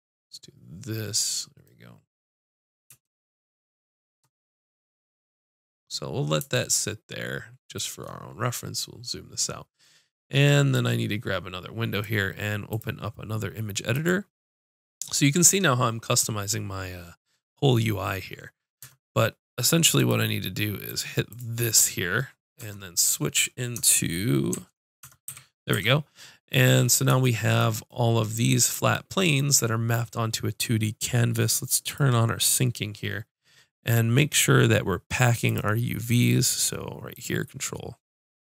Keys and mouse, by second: 0.4-1.9 drag, 10.7-12.1 drag, 13.9 click, 14.2 right click, 20.0-22.1 drag, 24.5 Tab, 25.3 a, 25.7 a, 31.8-37.2 drag.